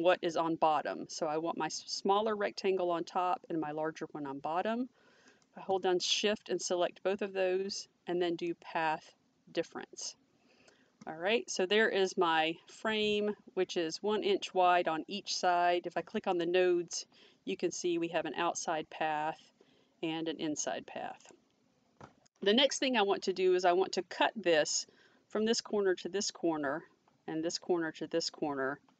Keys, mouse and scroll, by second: 5.3 click, 8.5 click, 16.3 click, 21.2 click.